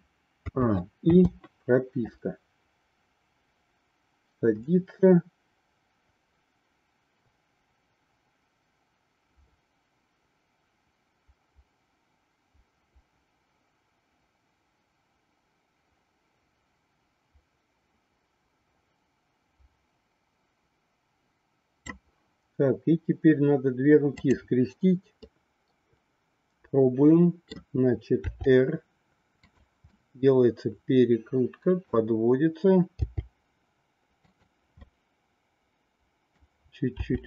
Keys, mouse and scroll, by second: 0.3 a, 1.1 i, 2.1-21.8 drag, 25.5-27.5 middle drag, 28.2 r, 29.9-32.0 middle drag, 33.0 g, 35.0-36.3 middle drag, 37.0 r.